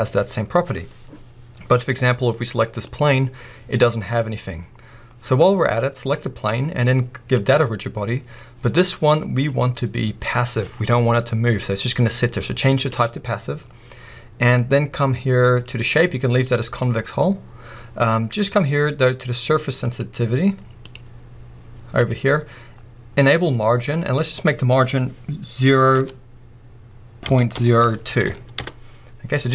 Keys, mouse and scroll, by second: 2.8 click, 5.2-7.3 scroll down 1, 7.3-23.5 drag, 8.8-9.4 scroll up 1, 24.0-29.5 drag, 28.7 Return.